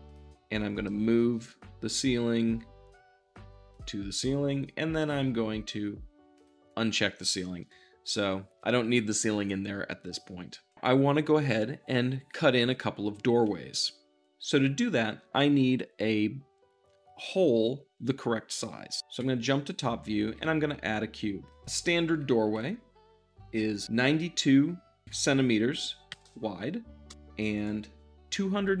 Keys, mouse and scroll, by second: 0.7 m, 3.6-7.5 drag, 7.5-19.0 middle drag, 19.0 `, 20.1 shift+a, 21.4-25.0 drag, 25.0 2, 26.0 c, 26.2 m, 27.0 Return, 27.5-28.8 drag.